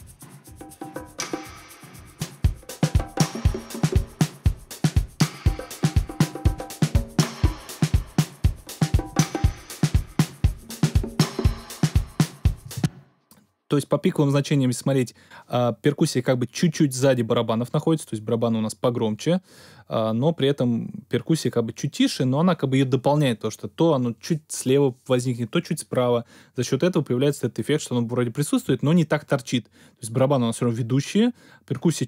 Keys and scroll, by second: 12.6 space.